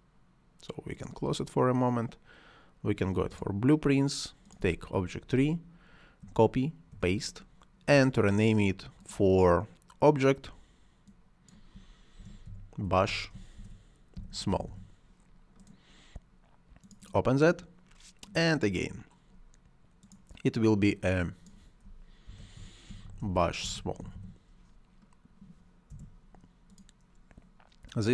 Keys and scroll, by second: 6.0 ctrl+c, 6.7 ctrl+v, 12.0 shift+b, 12.3 u, 13.4-14.8 typing, 21.9-24.3 typing, 25.7 Return.